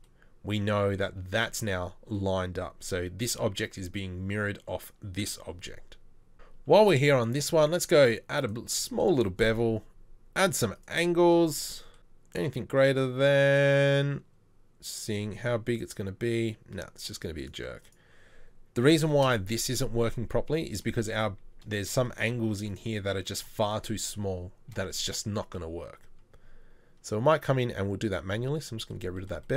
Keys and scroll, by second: 22.5 z.